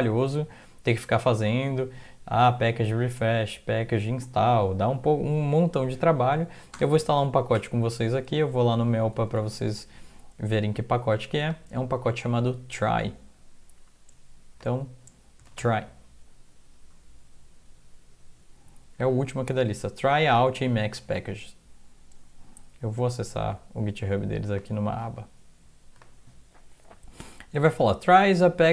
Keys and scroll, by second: 6.8 Return, 7.5 BackSpace, 8.3 alt+Tab, 9.1 alt+Tab, 15.2-16.1 typing.